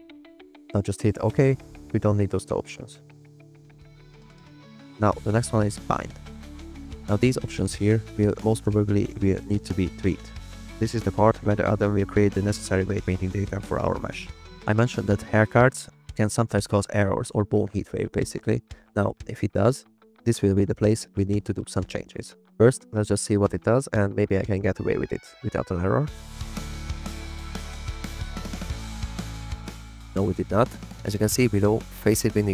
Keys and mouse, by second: 5.7-31.3 drag.